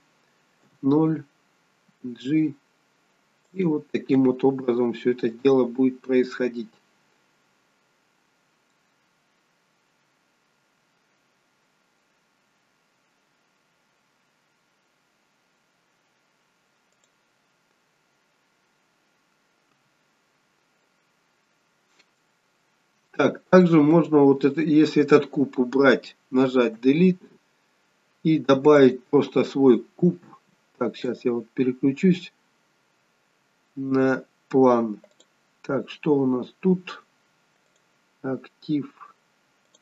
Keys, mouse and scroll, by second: 0.7 KP_0, 2.0 g, 5.3 click, 17.2 click, 19.8 KP_0, 20.4-21.0 scroll down 2, 21.0 middle click, 21.0 scroll down 1, 21.8-22.4 scroll up 4, 22.4 middle click, 22.4 scroll up 2, 23.4-24.5 scroll down 2, 24.5 click, 24.5-25.5 scroll down 1, 26.8 Delete, 28.9 click, 31.1 click, 31.8 scroll up 4, 33.7-34.1 scroll up 2, 34.3 scroll down 2, 35.1 click, 37.7 click.